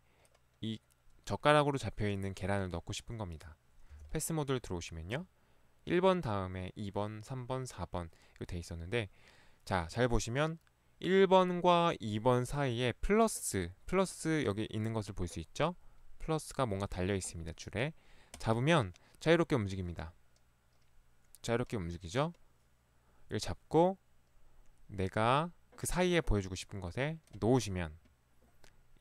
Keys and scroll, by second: 4.0 p.